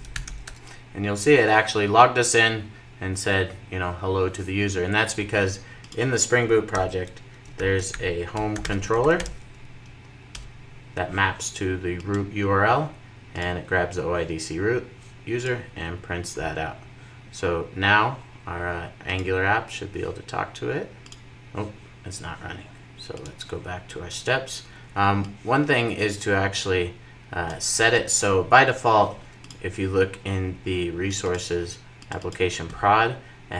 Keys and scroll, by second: 6.5 shift+super+o.